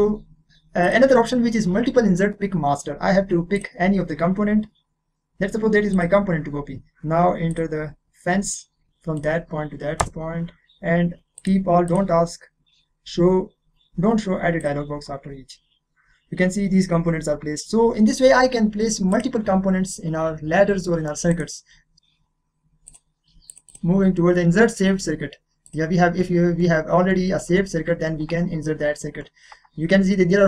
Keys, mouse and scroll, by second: 3.5 click, 5.9 click, 6.7 click, 7.5 click, 9.1 click, 10.0 Return, 11.3 click, 14.6 click, 19.1 click, 20.8 middle click, 21.3 click, 21.9 middle click, 22.8 click, 25.7 click.